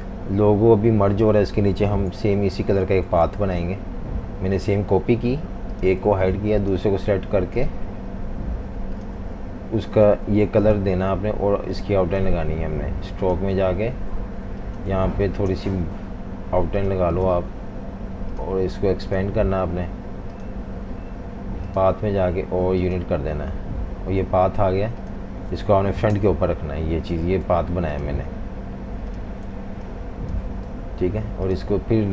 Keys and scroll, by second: 0.0 typing, 1.9 super+c, 3.0 super+c, 3.4 shift+super+v, 6.1 super+3, 10.3 i, 15.2 5, 15.5 Return, 26.1 shift+super+], 27.5 v, 29.5 typing, 30.7 v.